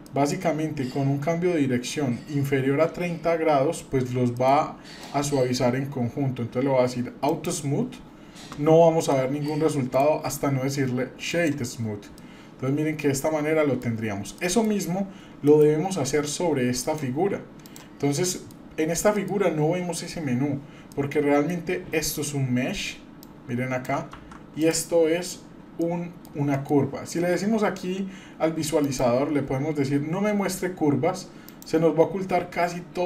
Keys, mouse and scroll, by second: 0.0 middle click, 4.4 middle click, 4.5-5.0 scroll down 1, 5.0 middle click, 7.3 click, 9.1 middle click, 9.9-11.5 right drag, 12.1 scroll down 1, 12.2-13.8 middle drag, 14.2 scroll down 1, 14.3 middle drag, 15.5 KP_Divide, 15.9-16.4 scroll down 3, 16.9 click, 16.9 scroll down 1, 17.6 click, 18.2 middle click, 18.8-19.2 scroll up 2, 19.2 middle click, 20.9 middle click, 22.0 click, 23.2-23.9 drag, 24.2 ctrl+z, 24.6 click, 25.8 middle click, 26.5 shift+middle drag, 28.8-33.0 drag.